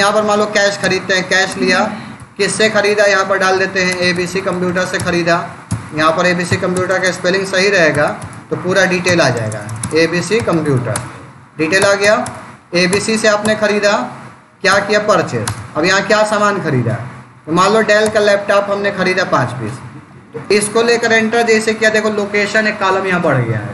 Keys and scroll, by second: 0.7 Return, 2.0 Up, 3.0-4.4 typing, 4.8 Return, 5.5 BackSpace, 6.3 End, 6.6 BackSpace, 7.8 u, 8.9 BackSpace, 10.0-11.0 typing, 15.3 space, 16.5 Down, 17.9 Return.